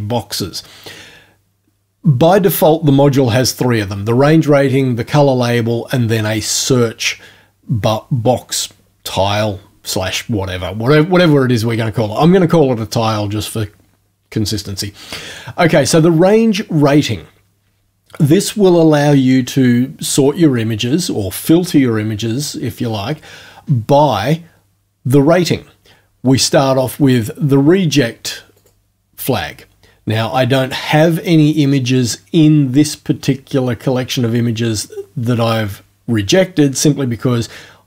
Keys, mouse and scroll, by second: 28.6 click.